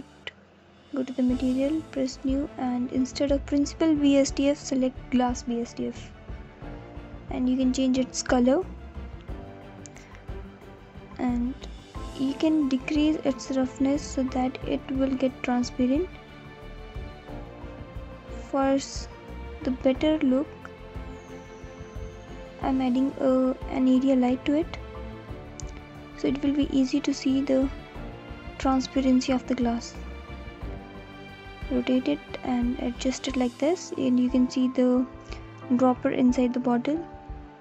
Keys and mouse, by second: 1.1-3.4 drag, 6.3 click, 11.6-13.9 drag, 15.0 shift+a, 15.4 shift+a, 21.0 s, 24.2 r, 28.0 g, 28.2 x, 30.8-32.5 alt+middle drag, 33.8 g, 34.1 z, 36.3 alt+middle click.